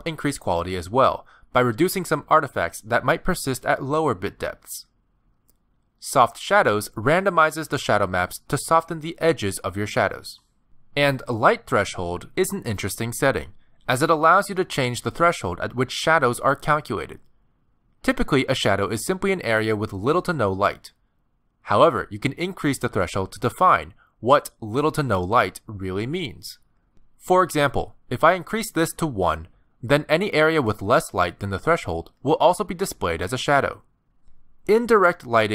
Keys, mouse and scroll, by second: 1.4 click, 2.4 click, 5.7 click, 6.4 click, 7.5-7.8 scroll up 3, 7.9 shift+middle click, 10.0 click, 10.9 click, 11.4 click, 13.6-14.4 scroll down 5, 16.6 click, 29.5 click, 31.4 scroll down 3, 32.3 g, 34.8-35.3 scroll up 4, 35.3 click.